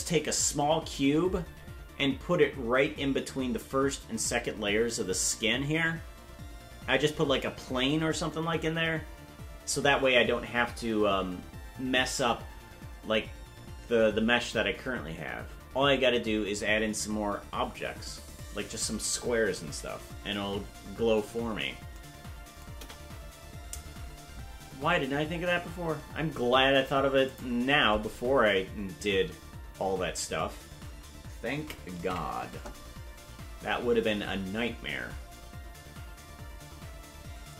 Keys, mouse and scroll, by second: 22.7 KP_0, 27.2 click, 34.1 ctrl+s.